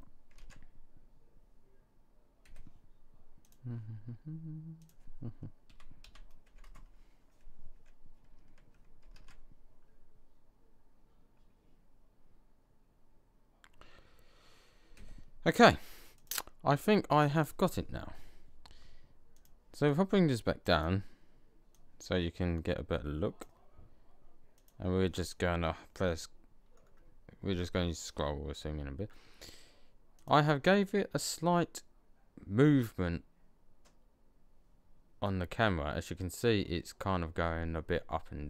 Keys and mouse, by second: 0.1 middle click, 0.2 alt+a, 2.4 Escape, 9.0 alt+a, 15.0 Escape, 21.7 click, 24.4-26.6 drag, 30.0 click.